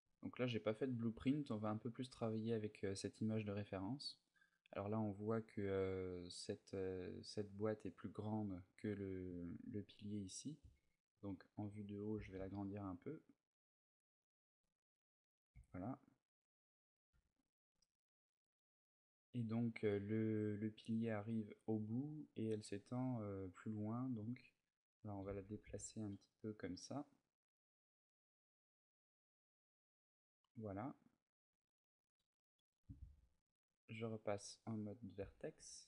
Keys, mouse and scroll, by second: 9.0 click, 9.7 middle click, 10.9 KP_7, 11.9 s, 14.0 click, 14.3 middle click, 15.3 z, 15.5 middle click, 16.9 Tab, 18.2 Tab, 23.9 click, 24.9 g, 28.4 click, 28.7 middle click, 31.3 Tab, 31.6 middle click, 31.9 a, 32.8 ctrl+Tab, 34.5 middle click, 35.0 z, 35.4 b.